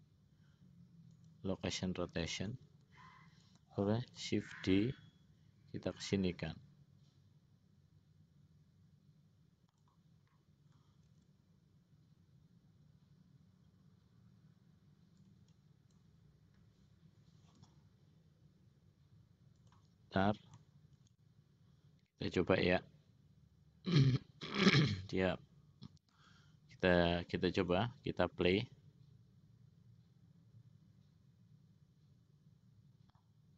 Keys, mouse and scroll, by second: 0.8-2.0 drag, 2.6-3.6 drag, 4.9 shift+d, 11.4 shift+d, 17.7 g, 21.3 shift+d, 27.8 click, 28.6 click.